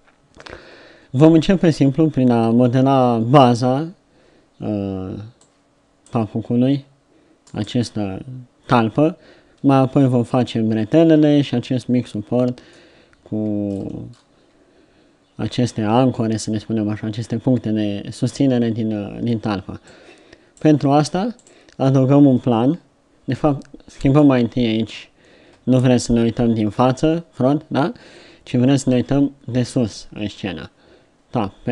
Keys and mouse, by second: 28.9 KP_7.